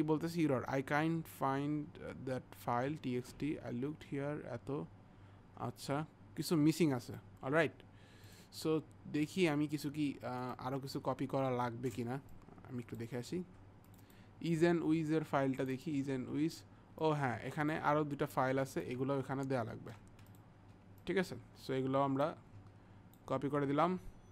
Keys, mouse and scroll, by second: 7.1 click, 8.3 click, 10.5 click, 12.4 click, 17.1 click, 20.7 shift+click, 21.1 click.